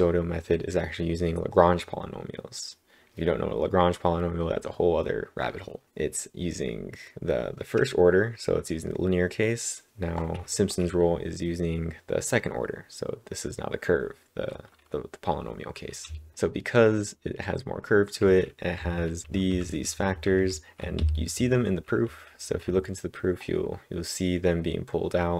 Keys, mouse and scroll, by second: 15.7-16.5 typing, 18.5-21.0 typing, 22.0 k.